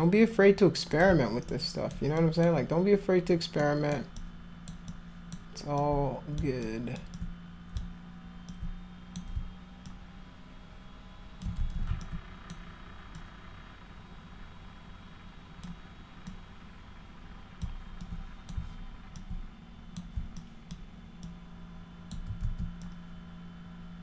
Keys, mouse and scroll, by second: 0.9 click, 1.5 alt+click, 2.2 alt+click, 3.6 alt+middle click, 4.2 alt+click, 4.9 alt+click, 5.8 alt+click, 6.7 alt+click, 7.2 alt+click, 8.5 alt+click, 9.9-11.4 alt+drag, 11.6 ctrl+z, 12.0 alt+click, 13.2-15.7 drag, 16.3-17.6 drag, 18.0 alt+click, 19.2 alt+click, 20.4 alt+click, 21.3 alt+click, 22.4 ctrl+z, 22.8-24.0 drag.